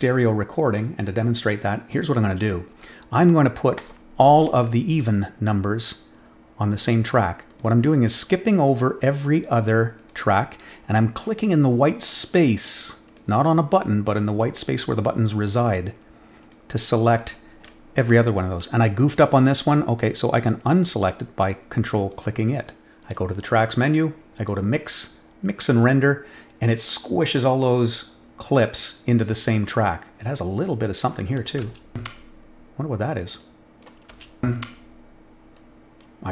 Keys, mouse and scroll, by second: 3.7 click, 4.9 ctrl+click, 7.4 ctrl+click, 9.9 ctrl+click, 13.0 ctrl+click, 16.4 ctrl+click, 20.5 ctrl+click, 21.9 ctrl+click, 23.0 click, 24.3 click, 25.6 click, 30.6-31.0 drag, 31.6 space, 33.3-33.8 drag, 35.5-35.9 drag.